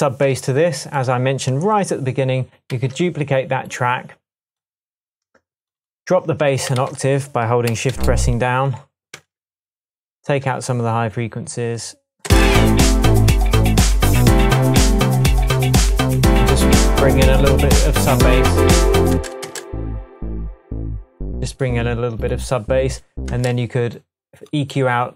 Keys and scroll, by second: 2.7 d, 6.8 a, 9.1 Tab, 12.2 space, 19.1 space, 23.3 space.